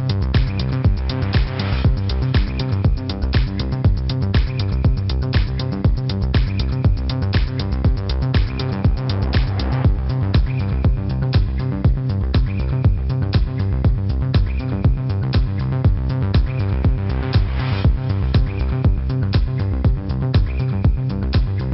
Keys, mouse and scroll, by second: 0.2 Tab, 0.9 shift+Tab, 1.2 KP_0, 2.2 KP_1, 2.8 Tab, 5.0 click, 9.2 click, 13.6 F9, 14.1 click, 19.2 v, 19.4 click, 20.0 alt+click, 20.8 Up, 21.1 click, 21.2-21.7 typing, 21.4 click.